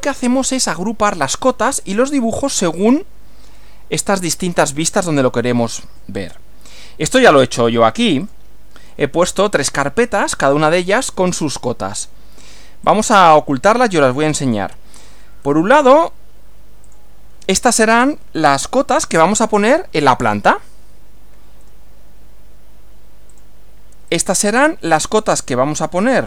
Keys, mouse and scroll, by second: 8.3 click, 10.1 shift+click, 11.1 right click, 12.9 click, 15.0 click, 15.5 right click, 16.9 click, 21.7 right click, 23.3 click, 24.1 click, 24.4 right click.